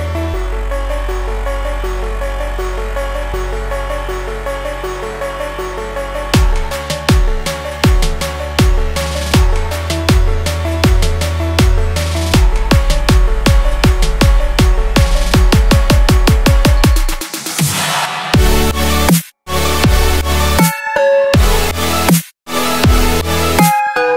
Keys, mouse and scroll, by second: 0.7 click, 1.0 click, 1.3 click, 1.5 typing, 2.1 click, 2.6 click, 3.7 click, 4.0 Left, 4.5 Left, 4.5 Left, 6.4 shift+click, 6.8 shift+click, 7.9 shift+click, 8.3 shift+click, 9.4-10.9 drag, 13.1 Left, 13.4 Left, 13.9 Left, 14.2 Left, 16.0 ctrl+g, 18.4-22.5 drag.